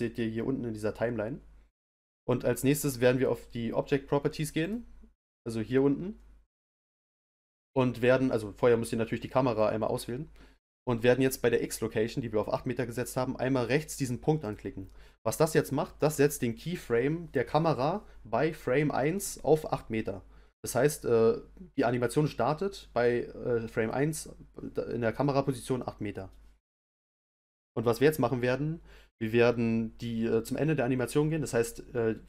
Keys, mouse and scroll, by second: 4.6 click, 14.4 click.